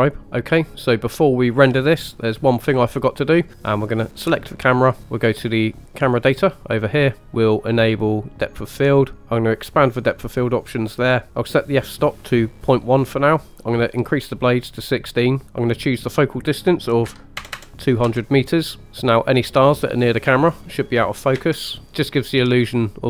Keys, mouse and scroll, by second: 3.9 click, 6.0 click, 8.5 click, 9.6 click, 11.3 ctrl+z, 12.1 click, 14.0 click, 15.6-18.0 drag, 17.5 KP_0, 18.8 click, 21.3 space, 21.8 shift+middle click, 21.8-22.6 scroll up 2, 22.6 scroll down 2.